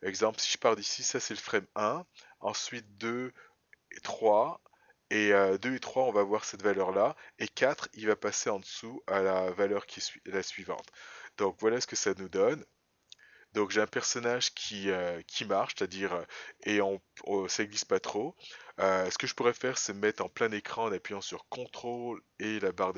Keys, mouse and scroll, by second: 11.6 click, 12.6 space, 15.9 space.